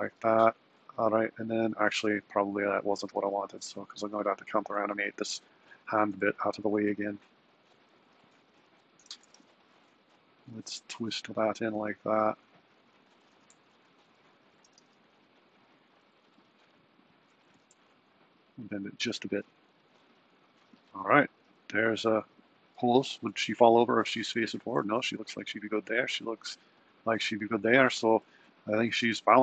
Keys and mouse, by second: 1.8 click, 2.5 click, 3.2 r, 5.8 r, 8.5 r, 12.5 click, 13.5 r, 14.8 r, 17.5 r, 23.3 super+Down, 25.2 super+Right.